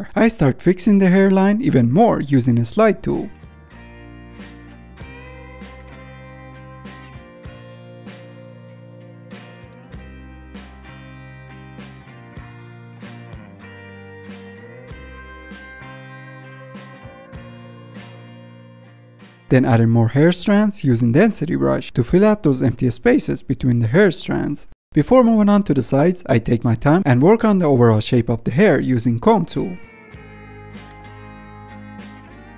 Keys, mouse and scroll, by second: 0.0 click, 0.6 f, 0.8-1.6 drag, 1.6 f, 1.7 drag, 2.0-2.8 middle drag, 2.8-3.5 drag, 3.5 f, 3.7 click, 4.4 middle drag, 4.7-5.3 drag, 5.3 f, 5.4-7.9 drag, 7.9 middle drag, 8.1 ctrl+z, 8.2-8.7 middle drag, 8.7 click, 8.9-9.5 middle drag, 9.5 click, 9.9 ctrl+z, 10.0 click, 11.5-12.3 middle drag, 12.4-13.0 middle drag, 13.0 f, 13.2 click, 13.5 ctrl+z, 13.6 drag, 13.8 ctrl+z, 13.9 click, 14.1 middle click, 14.3 ctrl+z, 14.4 click, 14.5 middle click, 14.7 click, 14.9 middle click, 15.1 click, 15.3 ctrl+z, 15.3 ctrl+z, 15.4 middle drag, 15.6 click, 16.1-16.6 middle drag, 16.6 click, 17.0 ctrl+z, 17.0 middle click, 17.4 click, 17.6 f, 17.8-18.7 drag, 18.7 ctrl+z, 18.8 click, 19.2 ctrl+z, 19.7 ctrl+Tab, 19.7 click, 20.3 click, 20.4 scroll up 2, 20.8 click, 21.0-21.5 middle drag, 21.5 click, 21.6-22.1 middle drag, 22.1 click, 22.2 middle click, 22.4 scroll down 2, 22.5-23.1 middle drag, 23.1-23.4 scroll up 5, 23.4 drag, 23.6 middle drag, 23.9-24.2 drag, 24.2 ctrl+z, 24.2 drag, 24.5 middle click, 24.8 click, 25.0 middle drag, 25.0-25.3 scroll up 2, 25.3-26.4 drag, 26.4 middle click, 26.6 drag, 26.8 middle drag, 27.0-27.4 drag, 27.4 middle drag, 27.6 drag, 27.8 middle drag, 27.9 click, 28.0-28.4 middle drag, 28.4 f, 28.5-29.9 drag, 29.9 f, 30.1-30.5 drag, 30.5 f, 30.7-31.5 drag, 31.5 middle drag, 31.7 scroll down 2, 31.9 ctrl+Tab, 32.0 middle click, 32.3 ctrl+Tab, 32.4 scroll up 2, 32.5 middle click.